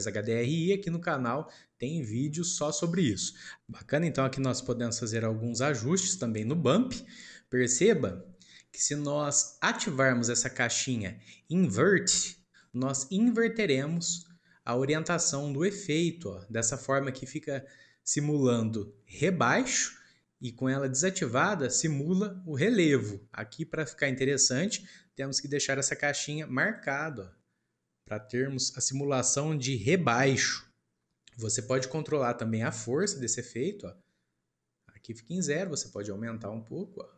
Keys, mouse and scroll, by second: 1.4-2.5 middle drag, 2.5 scroll up 2, 3.1-4.6 shift+middle drag, 4.6-5.2 scroll up 1, 5.2-5.6 scroll up 1, 5.6-7.3 middle drag, 7.3-8.1 scroll up 2, 8.1-8.8 middle drag, 8.8 scroll up 1, 12.4 click, 13.9 click, 15.3 click, 21.1 click, 26.6 click, 32.5-35.6 drag.